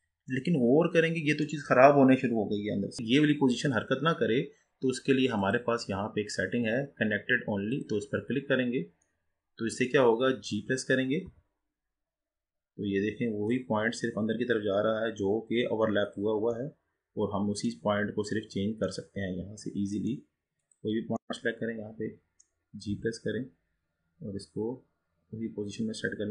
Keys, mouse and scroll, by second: 0.5-3.0 middle drag, 5.5-8.6 drag, 9.2-12.0 middle drag, 12.0 g, 16.7-18.0 middle drag, 18.0-18.6 scroll down 5, 18.6-19.2 scroll up 4, 19.2-20.7 middle drag, 20.7 click, 21.4-23.7 middle drag, 23.7 g.